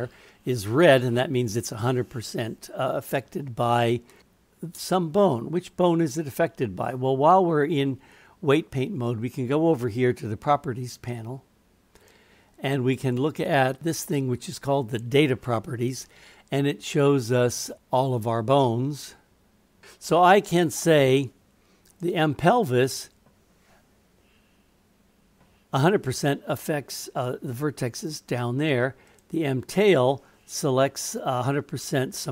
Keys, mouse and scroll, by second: 12.0 click, 17.8-19.8 drag, 21.9 click, 29.1 click.